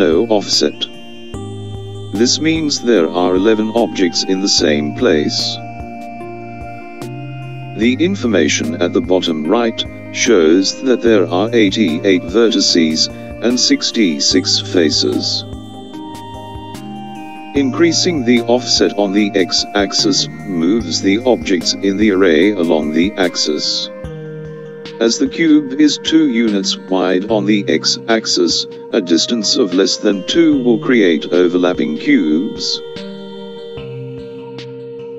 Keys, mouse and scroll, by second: 23.2 click, 33.7 click.